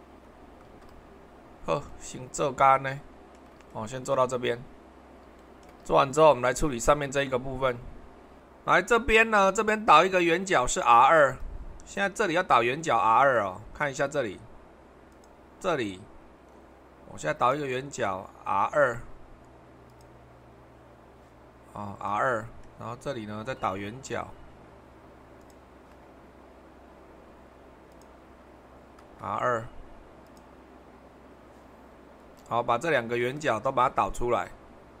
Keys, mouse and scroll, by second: 5.9 super+1, 8.4 super+1, 11.0 super+2, 15.1 click, 17.4-18.5 drag, 18.7 2, 22.1-25.2 middle drag, 31.7-35.0 middle drag.